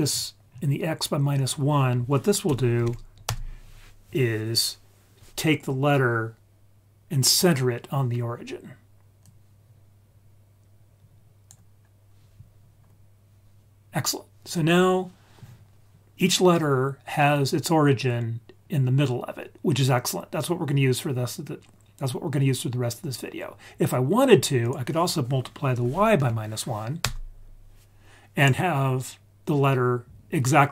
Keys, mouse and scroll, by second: 0.0-0.9 scroll down 4, 1.3 click, 9.2 click, 9.9 click, 13.9-16.9 scroll up 1, 24.6-27.0 drag.